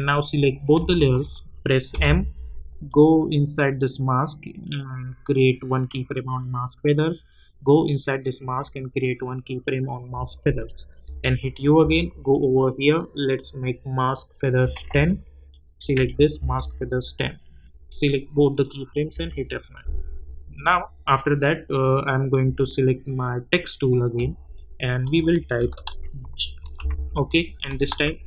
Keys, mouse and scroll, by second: 0.0 click, 1.0 shift+click, 1.9 m, 2.8 click, 11.0-12.3 typing, 14.4 click, 16.3 Return, 17.9 click, 19.1 F9, 19.6 click, 25.5-27.3 typing, 27.9 ctrl+a.